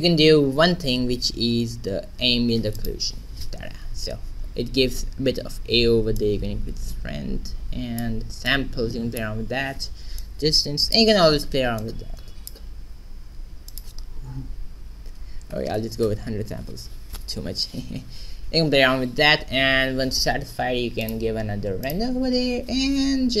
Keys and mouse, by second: 0.0 Escape, 1.1 n, 2.7 click, 4.6-6.2 middle drag, 6.2-7.9 drag, 8.4-14.0 drag, 14.1-15.7 drag, 16.2 0, 21.2-23.4 drag.